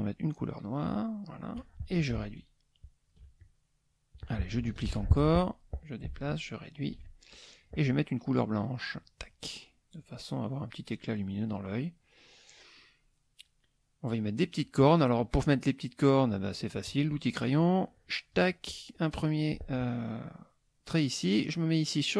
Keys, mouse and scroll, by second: 0.8 click, 2.2 ctrl+shift+click, 3.4 ctrl+shift+click, 4.9 ctrl+d, 5.2 ctrl+click, 6.2 ctrl+shift+click, 7.0 ctrl+shift+click, 8.9 click, 9.9 click, 11.6 middle click, 13.4 middle click, 16.8 click, 18.0-18.5 drag.